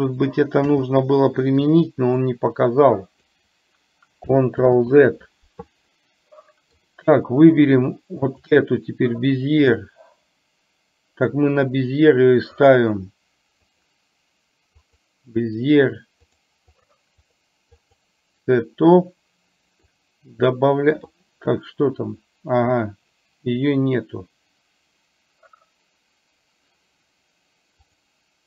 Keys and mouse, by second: 2.3-3.4 drag, 4.8 ctrl+z, 6.0 middle click, 8.3 click, 9.8-12.8 drag, 13.8-15.1 drag, 16.3 click, 16.8 click, 17.3 click, 17.9 click, 19.9-21.6 drag.